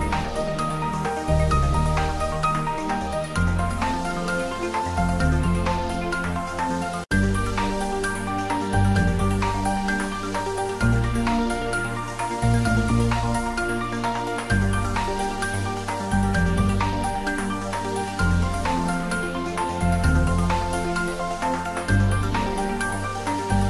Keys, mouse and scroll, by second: 0.1 scroll down 1, 0.4 middle click, 1.3 scroll up 1, 1.7 middle click, 2.3 scroll up 1, 3.1 shift+click, 3.6 ctrl+z, 4.0 shift+click, 4.6 ctrl+z, 5.2 shift+click, 5.7 scroll down 1, 5.8-7.6 middle drag, 7.6 scroll up 1, 8.3 middle click, 9.3 shift+click, 9.6 scroll down 1, 9.9-11.3 middle drag, 11.3 ctrl+b, 12.1-13.1 scroll up 1, 13.6 scroll up 1, 13.7 click, 13.9 Tab, 14.3-15.7 middle drag, 15.7 s, 16.0 y, 16.9 click, 17.4 s, 17.7 x, 18.3 click.